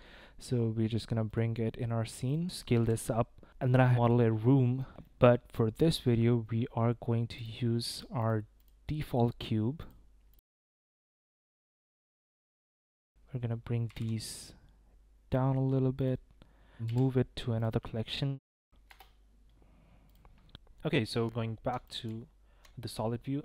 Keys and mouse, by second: 1.3-2.4 drag, 2.7 s, 3.8-5.4 middle drag, 6.1 click, 6.7-7.2 drag, 8.2 s, 10.1-12.2 typing, 11.1 ctrl+drag, 12.8 Tab, 13.0 Tab, 13.0 click, 13.1 Tab, 13.9 g, 16.0 click, 16.7 Tab, 16.9 m, 21.8 click, 22.0 z.